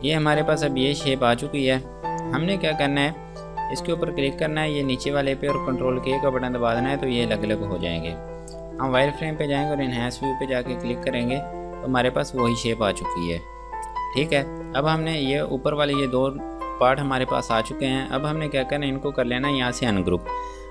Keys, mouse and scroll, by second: 0.4 click, 1.2 F2, 2.1 click, 3.7-4.1 scroll down 1, 4.1 click, 6.6 ctrl+k, 7.7 click, 15.2 click, 16.8 ctrl+z, 20.4 click.